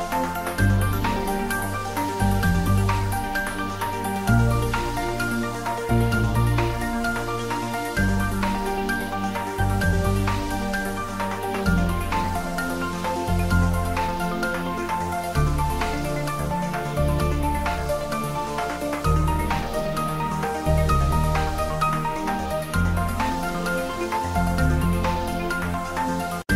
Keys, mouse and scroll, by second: 1.5 click, 1.5 click, 2.2 shift+middle click, 2.7 ctrl+middle click, 3.5 shift+a, 4.4 click, 6.6-7.9 typing, 9.0 click, 9.4 g, 11.6-13.0 typing, 11.6 click, 15.5 click, 15.9 g, 17.2 click, 17.6 s, 18.3 click, 18.6 g, 20.5 click, 22.5-23.3 typing, 25.3 click, 25.7 ctrl+middle click, 26.0-26.5 typing.